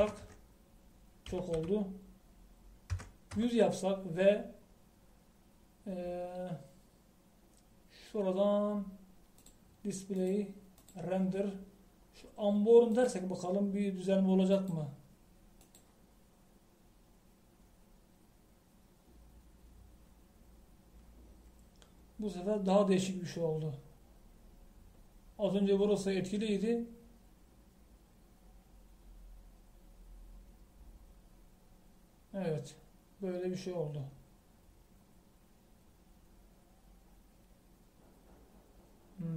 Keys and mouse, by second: 1.3 KP_0, 2.6 BackSpace.